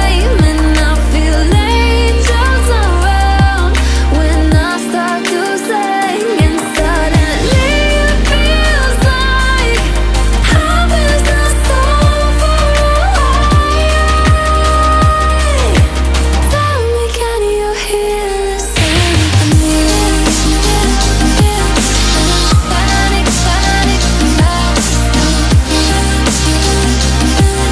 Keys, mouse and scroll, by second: 0.6 click, 3.5-4.9 alt+scroll down 2, 6.2 click, 10.1 click, 17.2 click, 17.3 click, 18.2-18.9 alt+scroll up 2, 19.3 click, 20.4-22.1 drag, 22.3 z, 23.4 click, 23.5 click, 23.9-25.3 alt+scroll up 2, 25.7-27.7 shift+drag.